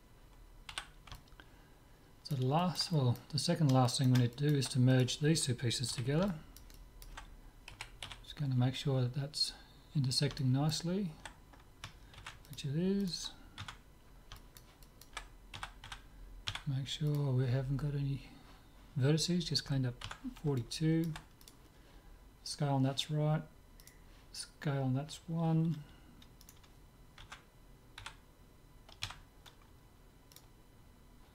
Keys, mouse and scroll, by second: 0.7 z, 1.2-7.8 middle drag, 4.9-6.8 drag, 5.9 z, 7.8 KP_7, 8.2 z, 9.1-12.3 middle drag, 12.2 ctrl+s, 13.1-14.7 right drag, 13.6 Tab, 14.4 click, 14.7-16.6 middle drag, 15.6 a, 16.0 a, 16.6 w, 20.1 Tab, 20.6-22.6 middle drag, 21.5-22.6 drag, 22.6 right click, 23.9-25.8 right drag, 26.5-28.4 right drag, 27.3 Tab, 28.2 a, 29.1 w.